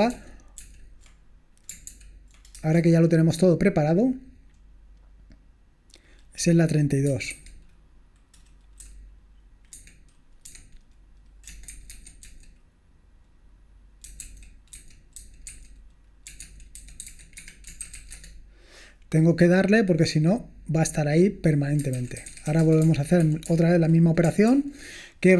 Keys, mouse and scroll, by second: 0.2 ctrl+p, 0.6 ctrl+p, 1.9 ctrl+p, 2.6 Return, 6.9-7.8 typing, 9.7 Escape, 10.4-12.7 typing, 14.0-18.3 typing, 20.3 click, 21.8-23.0 typing, 23.3 ctrl+p, 23.5 ctrl+p, 24.5 ctrl+p.